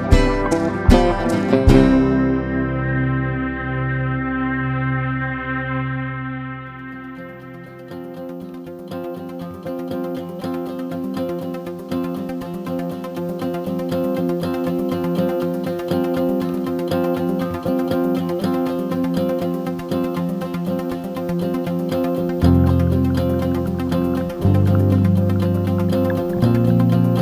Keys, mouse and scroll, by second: 1.5 shift+Delete, 3.1 click, 6.9 shift+click, 16.9 ctrl+scroll, 18.5-27.2 drag.